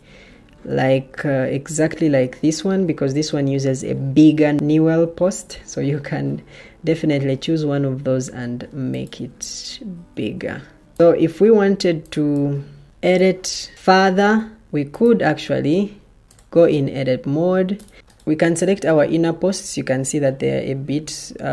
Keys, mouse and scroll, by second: 14.6 Escape, 17.9 Escape.